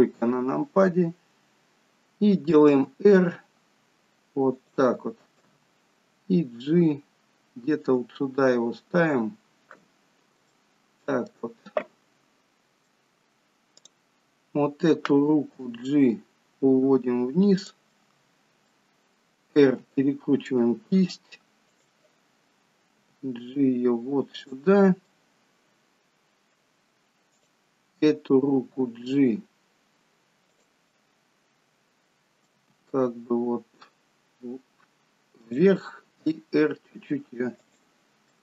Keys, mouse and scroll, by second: 2.8 r, 5.7 g, 9.4-9.7 scroll up 3, 10.5 shift+middle click, 12.4 middle click, 13.9 click, 14.4-15.2 scroll down 1, 15.2-15.7 scroll down 1, 15.7 g, 18.0 middle click, 19.9 r, 23.1 g, 25.2 middle click, 27.4 click, 28.1-28.9 scroll up 2, 28.9-29.5 scroll up 1, 28.9 g, 31.0 middle click, 32.7 g, 36.3 r.